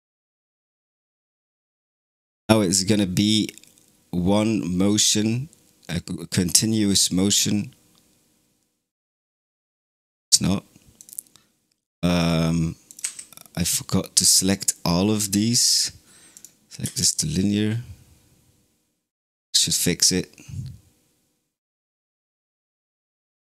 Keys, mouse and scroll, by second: 9.7 space, 10.8 click, 12.0 click, 12.7 click, 12.9 a, 15.5 t, 16.7 space, 18.5 right click, 20.3 click, 20.3 middle click, 20.3 right click, 20.7 click, 20.7 right click, 22.1 click, 22.1 right click, 22.5 click, 22.5 right click.